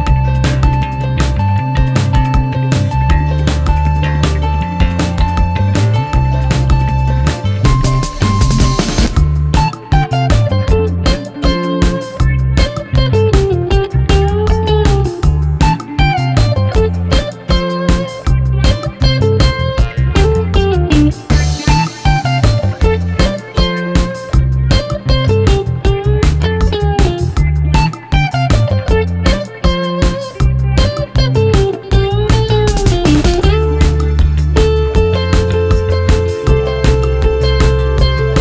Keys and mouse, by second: 0.9 shift+click, 1.4 ctrl+shift+click, 2.7 ctrl+shift+click, 3.6 shift+click, 4.9 shift+click, 6.1 shift+click, 6.1 shift+middle click, 6.5-7.7 middle drag, 8.1-8.7 middle drag, 9.0 shift+middle click, 9.7 shift+middle click, 11.1-11.4 shift+middle drag, 11.9 middle click, 16.8 p, 21.0 g, 21.5 x, 23.7 g, 24.1 x, 27.6 click, 28.3 click, 34.9 Tab, 36.1 x, 38.1 click.